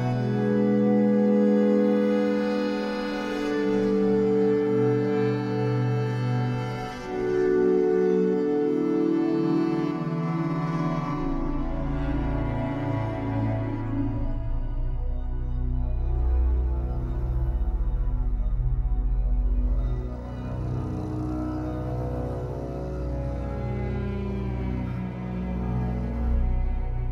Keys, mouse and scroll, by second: 0.4 e, 2.0 click, 4.2-8.5 shift+middle drag, 5.1 ctrl+s, 5.8-6.8 scroll up 2, 6.8 e, 8.5 click, 10.1 shift+middle click, 10.9-12.4 ctrl+right drag, 12.4 g, 13.9 click, 14.4 e, 16.2 click, 16.7 e, 18.2 click, 18.7 e, 19.4 click, 19.6 scroll down 2, 19.8-23.6 shift+middle drag, 20.6-22.8 scroll up 2, 22.8 e, 23.6 click, 23.9-27.0 shift+middle drag, 24.7 e, 27.0 click.